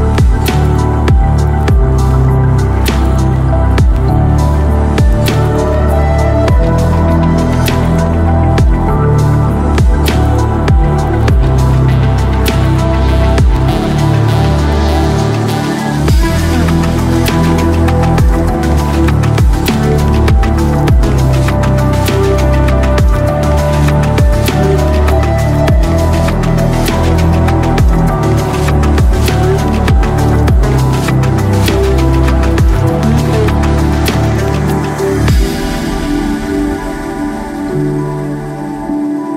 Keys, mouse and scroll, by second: 0.7 ctrl+s, 0.9 click, 4.8 middle click, 5.3 click, 5.5 click, 5.6 5, 10.3 click, 10.5-11.8 middle drag, 13.5 KP_0, 14.1 c, 14.4 click, 14.8 click, 15.0 shift+click, 15.7 shift+click, 16.7 click, 19.1 middle click, 19.5 middle click, 19.7 middle click, 20.0 click, 20.2 middle click, 20.4 right click, 20.8 right click, 21.3 right click, 21.5 right click, 21.9 right click, 22.1 right click, 22.6 shift+click, 23.4 click, 24.6 middle click, 24.8 middle click, 25.0 middle click, 25.4 shift+click, 25.9 c, 26.4 shift+click, 26.8 middle click, 27.0 shift+middle click, 27.4 shift+click, 27.9 shift+click, 28.6 shift+click, 29.6 shift+click, 30.2 shift+click, 30.8 shift+click, 31.4 shift+click, 31.8 shift+middle click, 31.9 shift+click, 32.2 c, 32.4 middle click, 32.7 c, 33.1 shift+click, 33.6 shift+click, 34.0 middle click, 34.2 shift+click, 34.7 shift+click, 35.1 shift+click, 35.5 middle click, 35.7 shift+click, 36.3 shift+click, 37.0 shift+click, 37.4 shift+click, 37.8 shift+click, 38.2 shift+click, 38.6 shift+click.